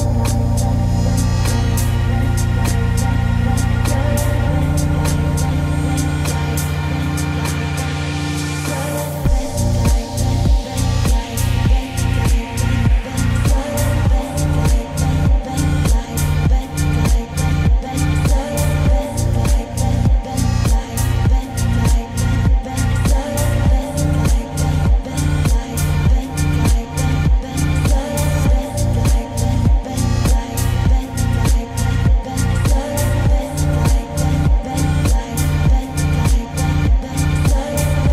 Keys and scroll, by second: 30.5 ctrl+g, 35.0 ctrl+z.